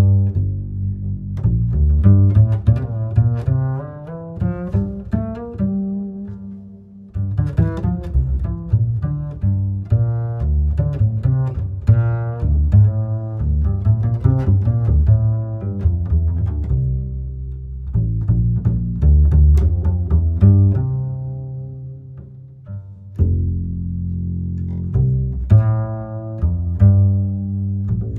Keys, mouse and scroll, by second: 1.0-1.9 drag, 1.9 scroll down 1, 2.1 scroll up 2, 2.2-2.6 scroll down 4, 2.6-3.6 middle drag, 3.6 shift+a, 7.7 shift+a, 12.1-14.1 alt+right drag, 14.4 ctrl+right click, 15.9 drag, 18.6 click, 21.3-24.4 drag, 25.5-27.8 middle drag, 27.8-28.1 drag.